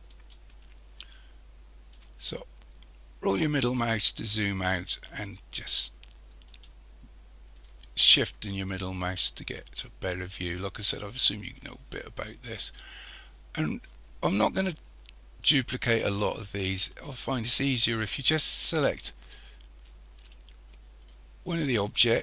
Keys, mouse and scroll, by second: 0.3-2.4 shift+middle drag, 2.4-2.9 scroll down 2, 2.9-3.3 scroll up 3, 3.3 scroll down 2, 4.5-7.5 shift+middle drag, 14.8 scroll up 1, 15.1-15.8 scroll down 4, 15.8-16.1 scroll up 4, 16.7-18.9 shift+middle drag, 18.9 click, 20.0-21.0 scroll up 4, 21.0 click.